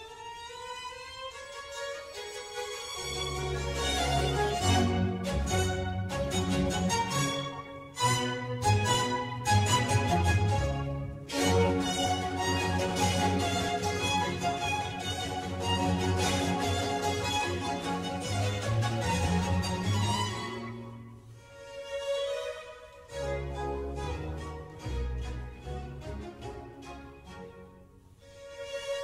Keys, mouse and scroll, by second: 1.3 click, 1.6 Tab, 2.1-4.3 middle drag, 4.3 g, 6.2 click, 6.6-7.5 middle drag, 7.5 shift+a, 10.1-11.0 middle drag, 11.0 g, 13.9-16.8 middle drag, 16.8 g, 19.8-22.0 middle drag, 22.0 Tab, 22.4 3, 23.4 click, 25.8 middle click, 26.4 click, 26.8 middle click, 27.7 click.